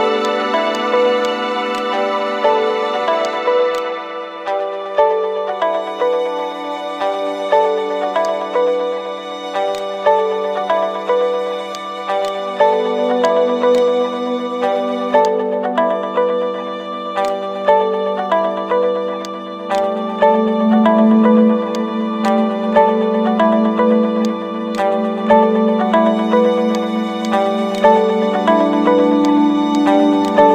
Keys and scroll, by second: 22.7 ctrl+z.